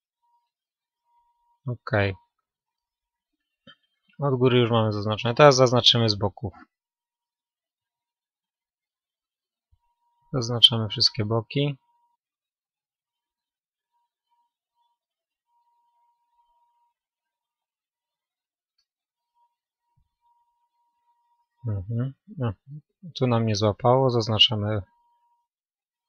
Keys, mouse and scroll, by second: 0.5-1.9 middle drag, 3.5 KP_1, 7.5 b, 8.7 KP_3, 11.2 b, 12.3 KP_3, 13.3 ctrl+KP_3, 15.7 b, 19.7 b, 20.5-24.8 middle drag, 23.1-26.0 right drag.